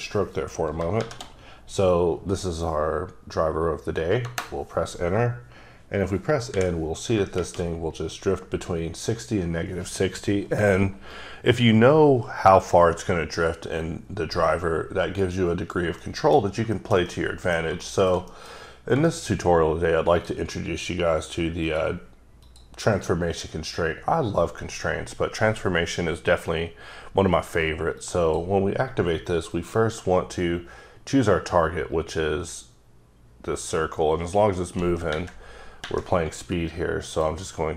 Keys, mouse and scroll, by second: 0.8-1.5 typing, 4.3 KP_Enter, 6.5 n, 16.0 middle click, 16.5 scroll down 1, 16.8 middle click, 17.1 double middle click, 17.8 shift+middle click, 18.6 scroll up 1, 19.1 shift+middle click, 19.3-19.7 shift+scroll down 2, 20.2 click, 21.6 click, 22.4 click, 28.1 click, 29.5 click, 37.1 click.